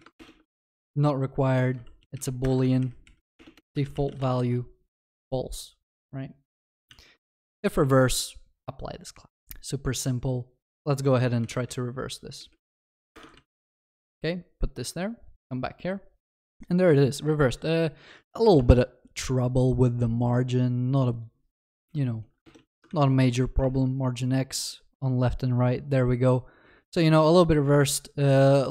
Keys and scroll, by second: 0.7 Delete, 2.4 Return, 2.6 ctrl+s, 13.2 Return, 22.9 ctrl+s.